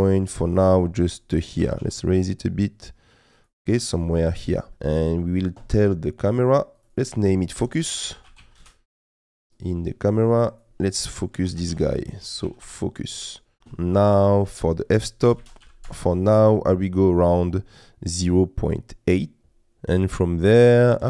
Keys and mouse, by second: 0.2 middle click, 1.6 g, 1.8 z, 3.7 middle click, 6.8 click, 6.9-8.6 drag, 9.6-12.7 drag, 14.2-15.9 drag, 19.1 middle click.